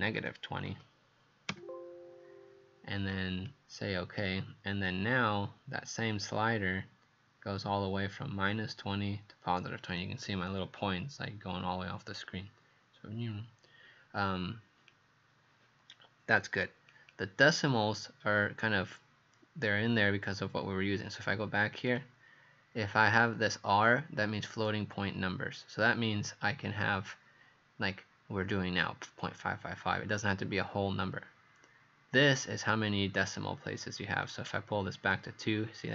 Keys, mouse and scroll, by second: 0.2 KP_Subtract, 0.6 KP_2, 0.7 KP_0, 1.5 KP_Enter, 3.1 click, 21.9 click, 34.2 click.